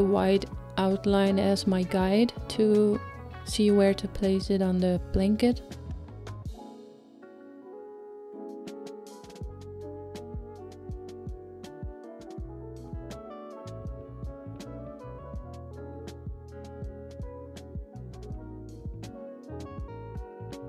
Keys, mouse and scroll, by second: 12.3 click, 13.3 scroll down 2, 14.0-19.1 middle drag, 19.1 click.